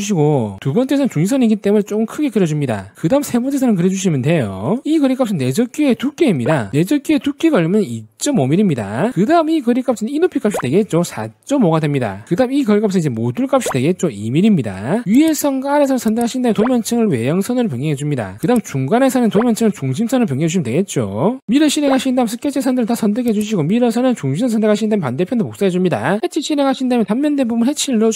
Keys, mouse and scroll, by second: 0.0 click, 1.3 click, 2.4 click, 3.0 1, 3.7 click, 5.1 click, 5.9 click, 6.4 click, 7.0 2, 7.6 5, 8.6 click, 9.3 click, 10.0 click, 10.5 click, 11.2 4, 11.6 5, 12.5 click, 13.1 click, 13.7 click, 14.2 2, 14.5 click, 15.1 click, 15.8 shift+click, 16.8 click, 18.1 click, 18.4 click, 19.5 click, 21.0 click, 21.3 click, 21.8 w, 22.1 click, 23.0 click, 23.7 click, 24.2 click, 24.5 click, 25.1 click, 25.5 middle click.